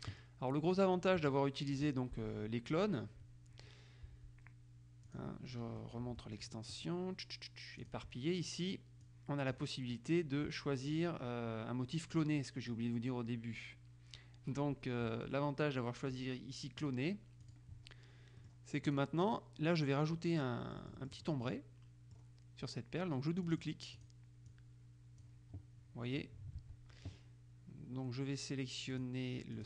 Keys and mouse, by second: 5.3 click, 8.0 click, 9.7 click, 12.3 click, 17.6 click, 18.5-19.6 drag, 20.8 click, 21.7 middle click, 23.6-24.7 drag, 26.7 ctrl+z, 29.1 click.